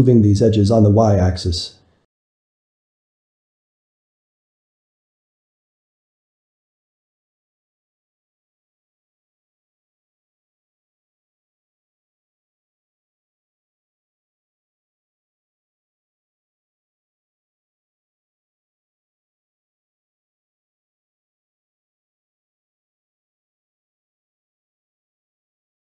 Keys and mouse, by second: 1.1 alt+a, 3.0 g, 4.5-6.8 middle drag, 6.8 Tab, 7.4-8.5 middle drag, 8.5 Tab, 8.9 ctrl+middle click, 9.6 drag, 9.9-11.0 middle drag, 11.6-12.9 shift+middle drag, 12.9 click, 13.7 shift+click, 14.4 alt+a, 16.0-17.1 ctrl+middle drag, 17.1 Tab, 17.4-20.9 shift+middle drag, 20.9 Tab, 21.4-22.7 shift+middle drag, 23.1-25.8 shift+middle drag, 25.8 click.